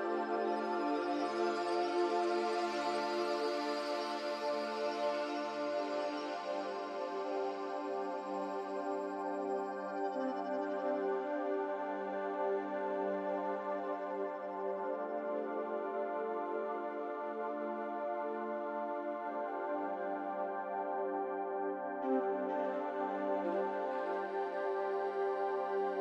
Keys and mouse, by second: 0.3 s, 2.3 g, 6.9 s, 8.9 s, 13.4 middle click, 14.5 g, 16.6 g, 21.6 shift+click, 23.2 ctrl+shift+KP_Subtract.